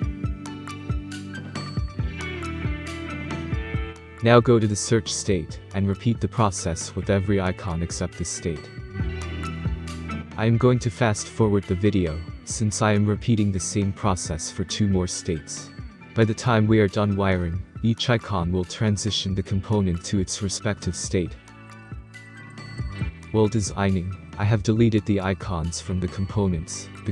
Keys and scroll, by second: 0.0-0.9 typing, 1.0 Return.